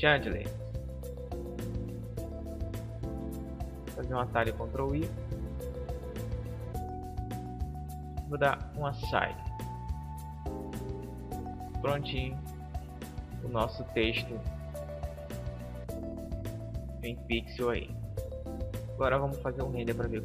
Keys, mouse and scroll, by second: 4.7 ctrl+i, 7.0-9.6 drag, 9.0 Tab, 9.9-12.1 middle drag, 12.3-13.4 middle drag, 13.8 KP_0, 15.1 Home, 18.1-20.0 drag.